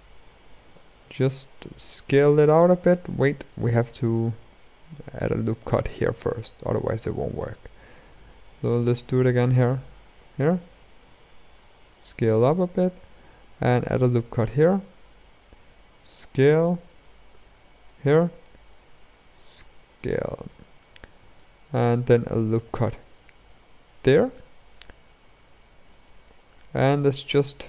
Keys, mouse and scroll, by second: 0.4 s, 4.2 ctrl+r, 7.5 alt+click, 8.3 alt+click, 9.3 alt+click, 9.9 s, 12.4-13.1 scroll up 1, 13.5 ctrl+r, 17.5 alt+click, 18.0 s, 20.3-22.1 shift+middle drag, 22.1 ctrl+r, 25.6-27.6 shift+middle drag.